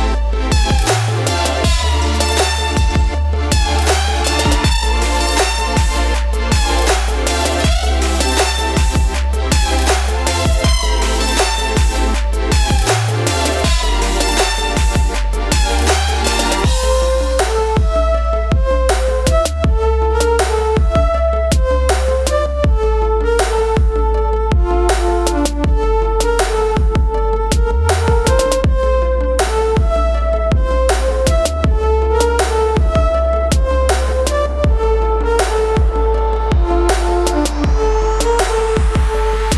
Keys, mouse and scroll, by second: 2.6 ctrl+shift+z, 5.9 ctrl+shift+z, 6.8 shift+click, 8.1 ctrl+z, 11.6-14.4 drag, 15.1 v, 17.0-19.7 drag, 19.8 click, 23.9 i, 24.4 click, 26.3 click, 28.4 click, 31.4 click, 31.6 ctrl+z, 34.2 ctrl+shift+z, 36.1 p, 37.2 ctrl+z, 38.7 ctrl+space, 38.8 ctrl+click.